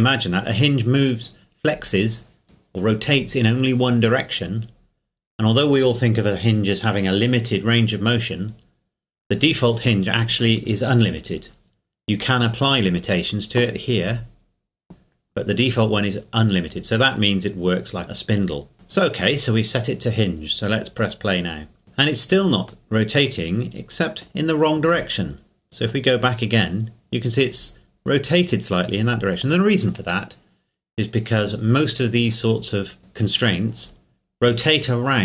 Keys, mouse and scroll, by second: 21.0 click, 22.9 middle click, 25.9 click, 26.1 click, 29.3 click.